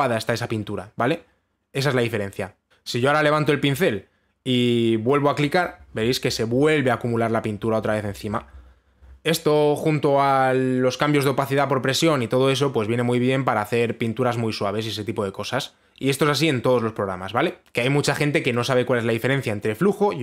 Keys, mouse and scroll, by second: 2.7 click.